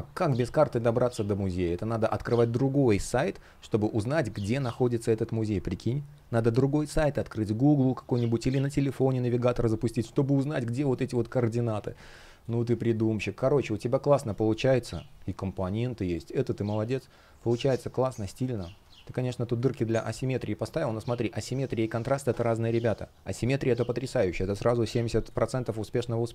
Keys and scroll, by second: 11.4 super+я, 12.1 space, 18.9 space, 25.0 space.